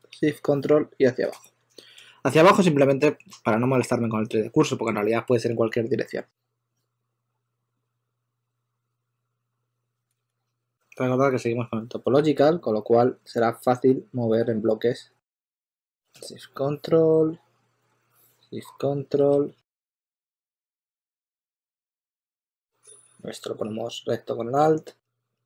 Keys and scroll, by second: 10.0-11.2 typing, 12.3 typing, 14.4 typing, 21.9 super+z, 21.9 super+z.